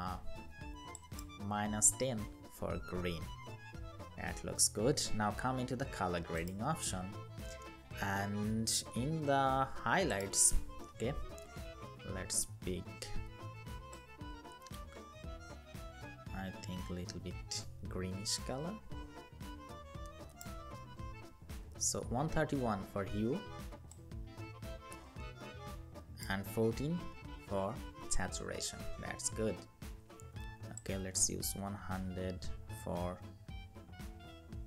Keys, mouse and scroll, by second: 1.1 Up, 5.0-8.1 scroll down 1, 20.2 Up, 20.4 Up, 20.6 Up, 28.3-29.3 scroll down 1.